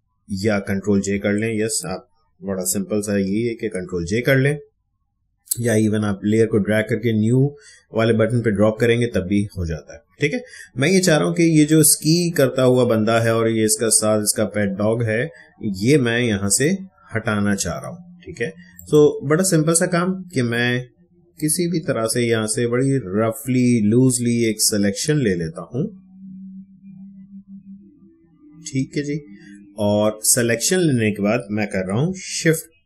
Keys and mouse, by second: 11.4 space, 11.6-14.6 ctrl+drag, 16.5-30.5 drag, 32.3 shift+BackSpace.